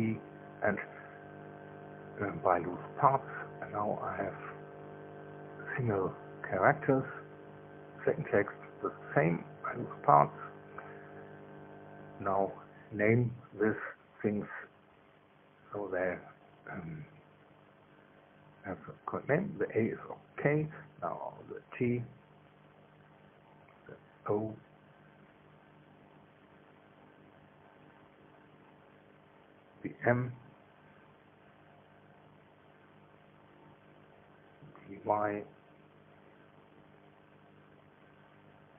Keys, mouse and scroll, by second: 0.0 p, 2.9 click, 4.3 Tab, 4.9 right click, 6.9 Tab, 8.6 p, 9.9 Return, 10.8 Tab, 11.9 right click, 22.1 right click, 22.9 click, 23.8 shift+t, 25.0 Return, 26.2 right click, 27.2 click, 28.3 shift+o, 29.2 Return, 30.6 click, 31.6 click, 32.1 click, 33.3 shift+m, 34.0 shift+Return, 36.1 right click, 37.2 click, 38.2 shift+i, 38.6 Return.